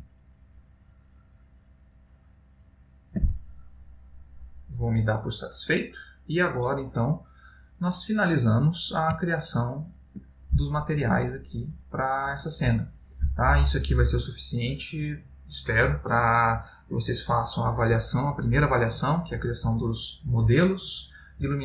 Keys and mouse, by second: 1.7 shift+g, 9.5 ctrl+middle click.